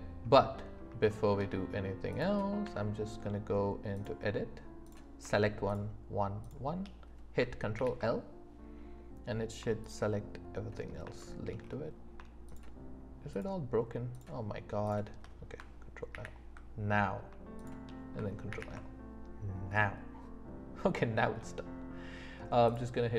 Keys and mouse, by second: 0.3 middle click, 1.1 shift+middle drag, 2.2 click, 2.6 Tab, 4.8 click, 6.4 shift+click, 7.7 ctrl+l, 9.8 shift+click, 11.2 shift+middle click, 12.4 shift+click, 13.4 shift+click, 14.8 shift+click, 16.1 ctrl+l, 17.6 shift+click, 19.9 middle click, 20.1 click, 20.4 middle click, 20.6 click, 22.7 click.